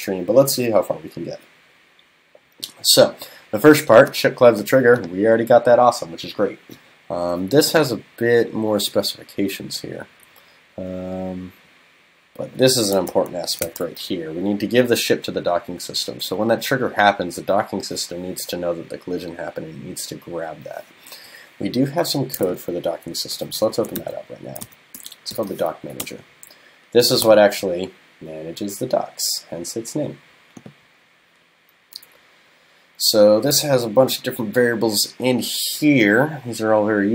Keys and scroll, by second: 13.1 super+Right, 23.3 super+..